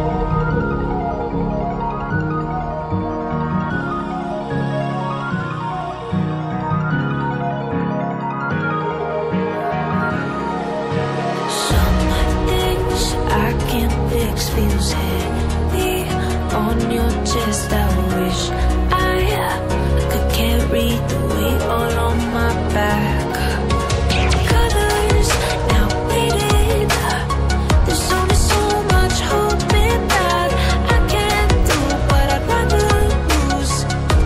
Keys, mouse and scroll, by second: 0.0-5.8 typing, 5.6 double click, 10.7-11.1 scroll up 1, 11.1 click, 14.3 scroll down 1, 14.6 click, 26.9-28.0 scroll down 1, 28.0-28.4 scroll down 1, 33.8 click.